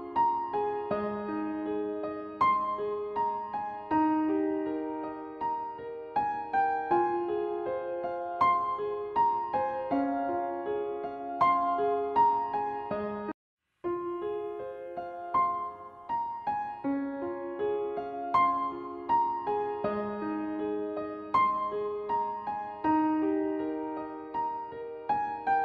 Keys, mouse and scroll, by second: 2.3-4.6 drag, 6.8-13.7 drag, 14.7-19.3 drag, 19.4 ctrl+d, 21.4-23.6 drag, 24.1 click.